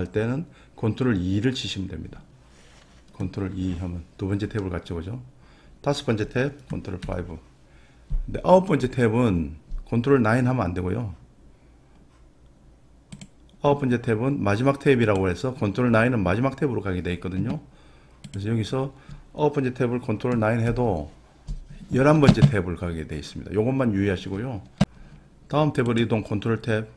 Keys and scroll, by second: 3.5 ctrl+2, 7.0 ctrl+5, 20.6 ctrl+9.